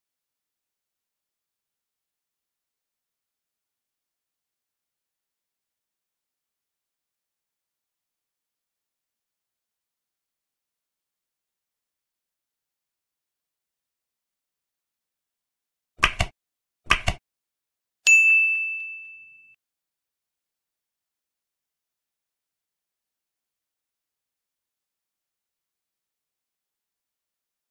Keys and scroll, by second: 0.3 space, 1.6 ctrl+s, 1.8 Up, 2.0 ctrl+s, 2.2 F5, 7.1 ctrl+s, 9.8 Delete, 10.1 ctrl+s, 12.8 End, 13.9 Left, 20.8 ctrl+s, 23.7 space, 24.2 ctrl+e, 24.3 End, 25.6 Left, 27.6 ctrl+s.